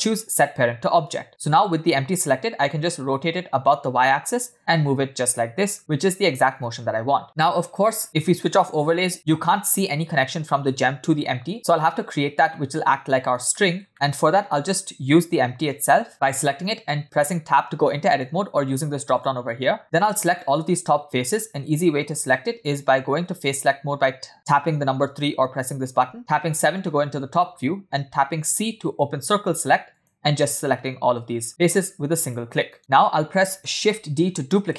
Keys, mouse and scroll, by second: 2.3 click, 4.0 r, 7.5-8.0 scroll up 5, 8.0 click, 8.9 scroll down 2, 11.5 click, 14.2 shift+middle click, 14.2 click, 14.2-15.6 scroll down 1, 18.1-19.8 drag, 20.2 middle click, 20.2 scroll down 1, 20.5 click, 23.6 3, 26.2 KP_7, 26.9-28.2 scroll down 1, 28.2-28.9 scroll up 2, 28.9 c, 32.8 middle click, 33.5-33.9 scroll down 2, 34.3 shift+d.